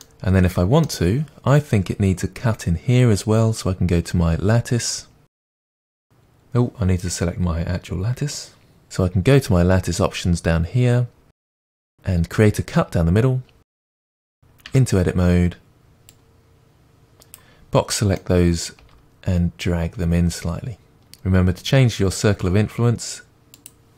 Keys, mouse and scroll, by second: 7.8 click, 11.6-14.7 drag, 14.7 Tab, 15.6-17.4 middle drag, 17.4 click, 18.2-23.9 middle drag, 18.8 g.